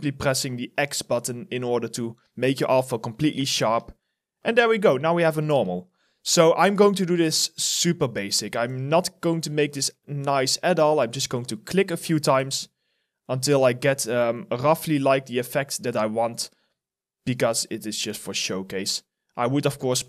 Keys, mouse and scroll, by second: 3.2 alt+click, 5.2 ctrl+z, 5.7 alt+right click, 6.1 alt+click, 10.1 alt+click, 10.8 alt+middle click, 12.3 ctrl+z, 13.2 ctrl+z, 15.3 alt+click, 16.0 alt+right click, 16.2 alt+click, 18.1 ctrl+z, 19.5 alt+click.